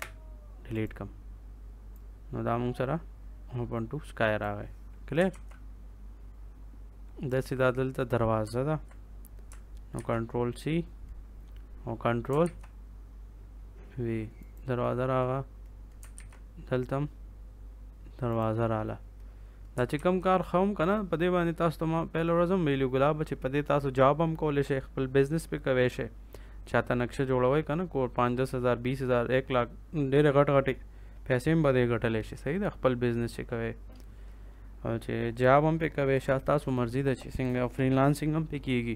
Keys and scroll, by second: 5.2 ctrl+s, 9.9 ctrl+c, 12.3 ctrl+v, 16.1 ctrl+v, 19.9 ctrl+s.